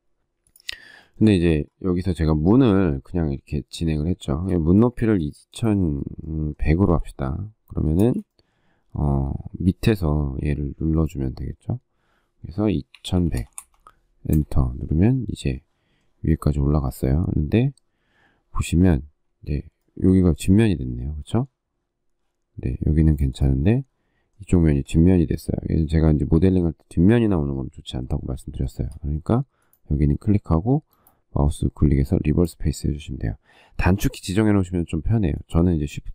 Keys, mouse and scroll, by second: 1.0 shift+middle click, 4.1 shift+middle click, 4.7 space, 6.6 m, 7.7 space, 10.2 p, 12.5-13.8 typing, 14.1 Return, 19.0 space, 28.5 shift+middle click.